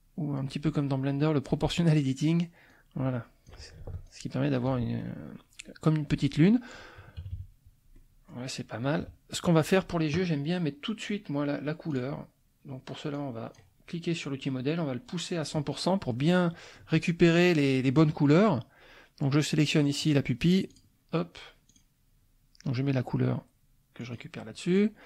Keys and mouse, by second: 0.7 click, 2.7 click, 4.1 ctrl+shift+click, 7.2 KP_Subtract, 7.9 click, 9.0 KP_Subtract, 11.9 click, 13.2 click, 16.0 click, 16.8 click, 17.3 click, 20.7 click, 21.6 click, 24.0 click.